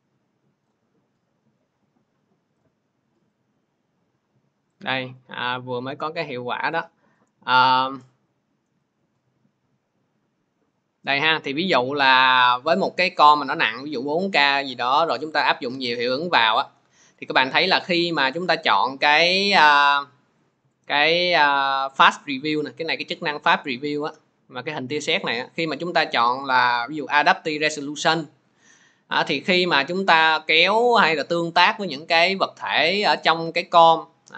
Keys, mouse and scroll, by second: 0.5 click, 2.4 click, 7.5 click, 18.2 click, 19.3 click, 24.4-27.5 drag, 27.5-33.4 drag.